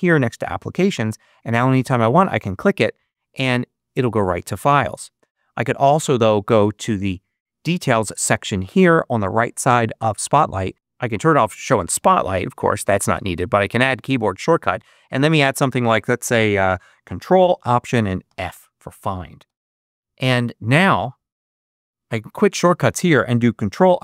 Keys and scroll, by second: 19.3 Return, 21.4 super+q.